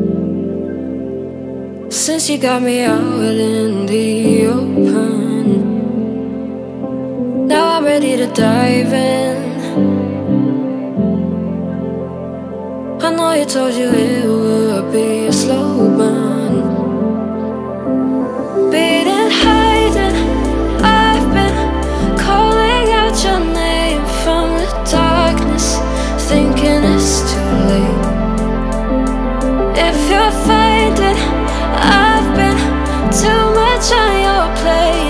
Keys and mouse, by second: 0.3 click, 1.1 z, 2.1 shift+d, 3.6 click, 5.1 shift+d, 5.2 x, 6.1 drag, 6.6-7.0 middle drag, 7.2 shift+middle drag, 7.6 ctrl+middle click, 9.3 click, 9.7-10.3 middle drag, 11.2-11.7 middle drag, 12.5 click, 13.0-14.1 middle drag, 17.1 Tab, 17.6 click, 17.8 middle click, 18.6 middle click, 18.9 shift+d, 19.0 y, 21.2 Tab, 21.5 click, 22.0-22.9 middle drag.